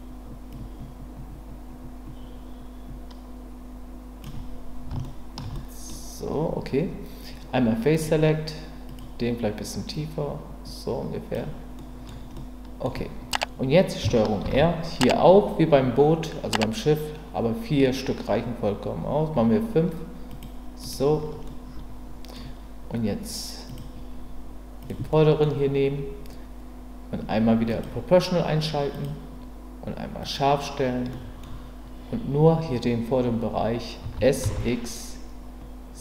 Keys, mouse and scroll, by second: 0.5-4.2 drag, 5.0 shift+middle click, 5.5-5.9 scroll up 1, 7.9 click, 8.9 click, 10.0-11.3 drag, 11.8 scroll up 1, 12.3-12.9 scroll up 1, 12.9-14.0 middle drag, 14.4 ctrl+r, 21.5 middle click, 23.7 click, 24.8 click, 25.1 middle click, 27.7 click, 28.9-30.7 drag, 31.1 middle click, 34.0 s, 34.4 x.